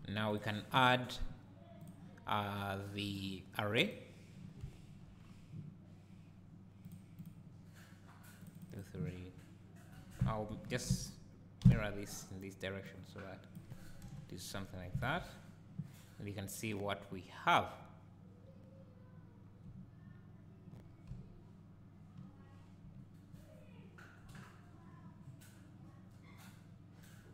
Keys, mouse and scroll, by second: 0.0-0.3 scroll down 1, 0.3 click, 1.8 click, 3.1-6.9 drag, 4.6 `, 5.1-5.6 scroll down 1, 7.2 click, 8.4 click, 10.5 ctrl+m, 12.2 click, 12.8-15.0 drag, 14.0 KP_0, 15.0 alt+a, 19.4-19.7 scroll down 2, 20.8-21.1 scroll down 2, 22.5-22.9 scroll up 2, 23.8-27.3 drag, 23.8 scroll down 2, 24.3 `.